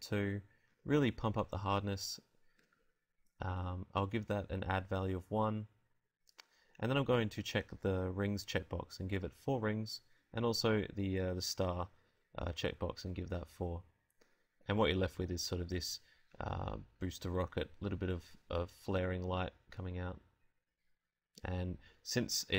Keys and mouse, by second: 2.1-4.3 drag, 7.5-9.3 drag, 11.3-16.3 drag, 16.5 Escape.